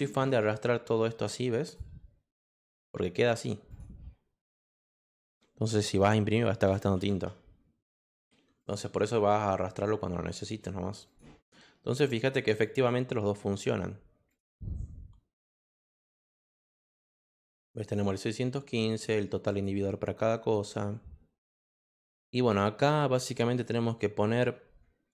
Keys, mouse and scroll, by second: 0.2-1.7 drag, 0.3 Return, 3.2 click, 3.7 click, 8.0 click, 8.6 click, 9.1 Return, 11.0 click, 12.6 click, 14.3 click, 15.6 click, 16.1 click, 17.1 click, 17.6 click, 18.9 click, 19.4 click, 23.5 click.